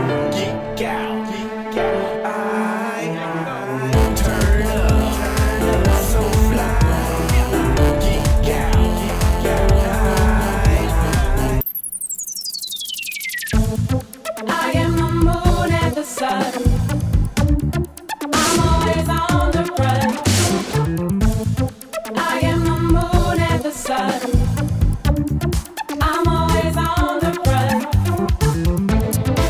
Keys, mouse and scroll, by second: 0.0-0.8 typing, 1.2 Return, 4.4-4.8 drag, 5.7 click, 6.9-8.2 drag, 9.2 click, 10.7 click, 11.4 click, 12.9 click, 13.4 click, 14.0 click, 14.1 click, 17.5 click, 19.8-21.9 drag, 22.4 click, 23.1 scroll up 1, 24.1-24.4 drag, 25.2 click, 27.2 click, 28.2 click, 28.4 click.